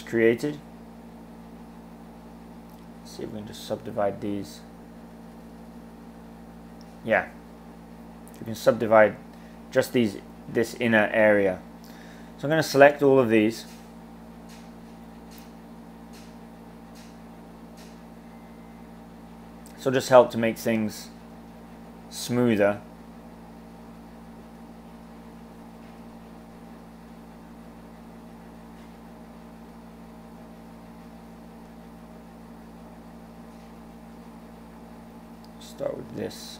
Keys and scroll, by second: 9.9 super+z.